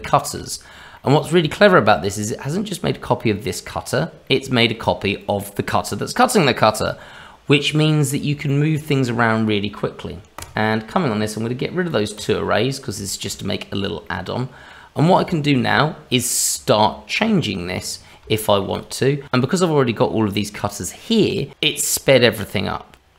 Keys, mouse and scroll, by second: 0.0 shift+middle click, 0.5-0.9 scroll up 3, 0.9 middle click, 1.6 middle click, 3.2 click, 4.2 middle click, 5.2 click, 7.9 scroll down 2, 8.5 shift+middle click, 9.0 middle click, 10.3 click, 11.9 click, 13.0 shift+middle click, 13.4-14.7 scroll up 3, 14.0 middle click, 15.0-15.7 scroll down 2, 15.7-16.7 scroll up 1, 17.2-17.9 scroll up 2, 17.9 scroll down 2, 18.4 shift+middle click, 18.7 click.